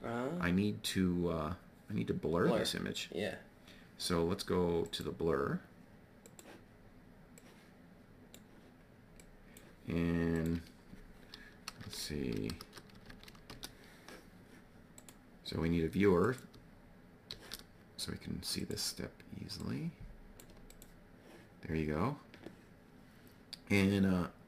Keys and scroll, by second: 11.2 1, 11.8 0, 12.6 Tab, 12.9 1, 13.1 0, 13.4 Return, 17.2 shift+d.